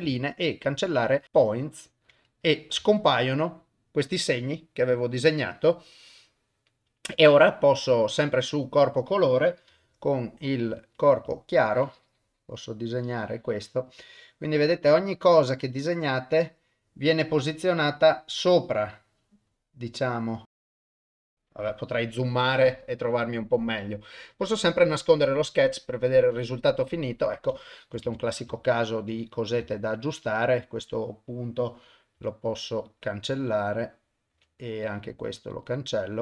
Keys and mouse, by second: 0.0 x, 2.8 Tab, 6.1 click, 8.7 click, 9.7 u, 11.6-16.2 shift+drag, 17.4-20.2 shift+drag, 20.4 ctrl+z, 20.4 click, 24.2 click, 27.0 ctrl+middle click, 27.7 shift+middle click, 28.1 Tab, 28.7 ctrl+middle click, 29.2 click, 29.7 ctrl+middle drag, 30.3 click, 32.2 x, 33.6 click, 34.3 x, 35.5 click.